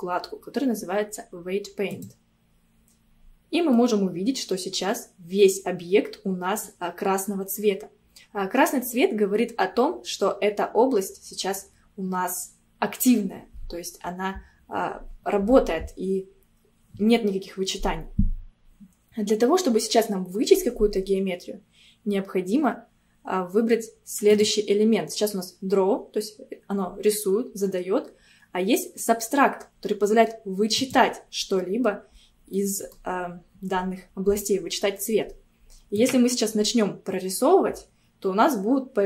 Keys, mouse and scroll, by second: 3.2-3.8 scroll down 2, 3.8-6.8 middle drag, 7.3-8.8 scroll up 1, 8.8-10.3 scroll up 1, 24.4-27.5 drag, 32.6-35.6 middle drag, 36.0-39.0 drag.